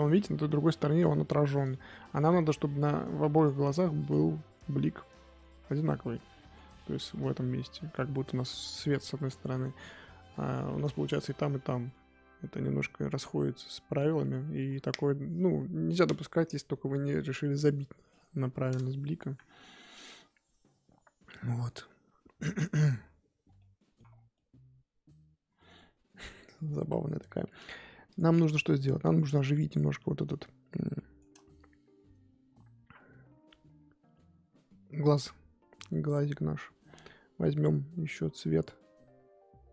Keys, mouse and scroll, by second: 0.1 scroll up 1, 0.5 KP_1, 1.0-2.3 scroll up 3, 2.3 ctrl+z, 2.4-2.8 scroll up 5, 2.8 f, 4.0 click, 4.5-5.0 scroll down 9, 5.0 middle click, 5.4 scroll up 1, 5.6-6.0 scroll down 1, 6.0 middle click, 6.6-7.7 scroll up 3, 7.7 scroll up 1, 7.8 scroll down 3, 7.9-9.7 middle drag, 9.7-10.4 scroll up 2, 10.4-10.8 scroll up 1, 10.8-19.3 middle drag, 19.3 KP_1, 19.5-20.5 scroll up 9, 23.4 scroll down 2, 23.5 middle click, 24.1 scroll down 3, 24.3-26.8 middle drag, 26.8 KP_1, 26.9-28.1 scroll up 7, 28.1 click, 28.6-30.6 scroll up 2, 31.0 shift+middle click, 31.4-35.7 scroll up 2.